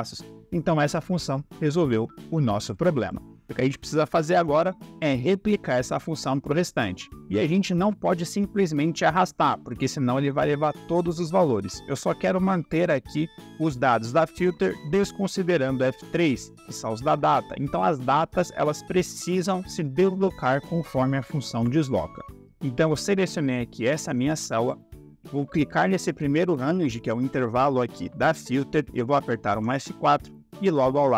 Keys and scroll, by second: 3.5 Delete, 29.4 F4.